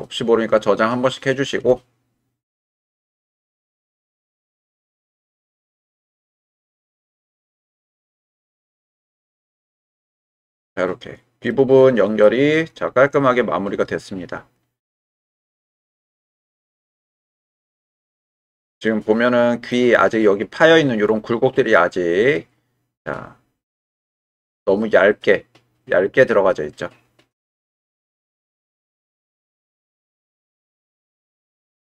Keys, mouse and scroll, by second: 4.0 click, 4.1 middle click, 4.9 Tab, 5.4 click, 7.4-9.0 drag, 9.2 click, 9.6-11.5 middle drag, 12.2-19.7 middle drag, 21.6-27.8 middle drag, 28.6-29.6 middle drag, 29.6-30.5 right drag.